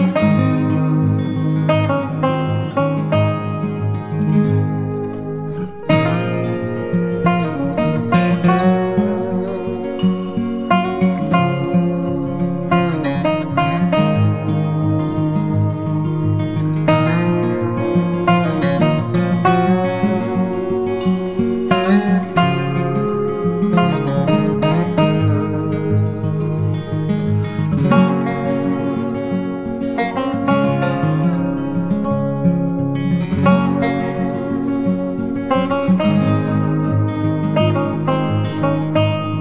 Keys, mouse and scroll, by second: 5.3 right click, 15.0 right click, 21.7 ctrl+t, 29.3 alt+s, 29.9 alt+shift+click, 31.6 ctrl+click, 34.9 ctrl+click, 37.7 ctrl+shift+click, 39.1 ctrl+alt+click.